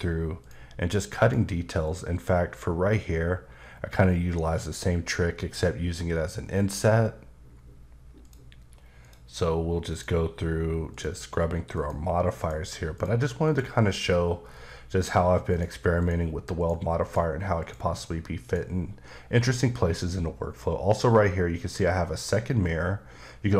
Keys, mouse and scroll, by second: 0.4 click, 1.8 click, 8.2 click, 9.0 click, 9.9 click, 10.9 click, 12.4 click, 12.9 click, 13.4 click, 13.9-15.5 scroll down 6, 16.0 click, 16.6 click, 17.0 click, 17.6 click.